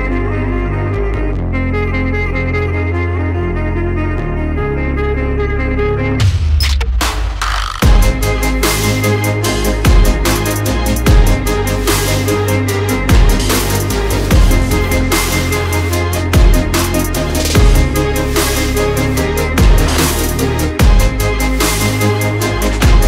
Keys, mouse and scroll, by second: 0.2 Tab, 0.4-1.9 typing, 4.4 Tab, 5.2-5.9 typing, 7.8 Tab, 8.7-11.2 typing, 16.1 click, 17.3 click, 18.2 click, 18.8-21.5 typing.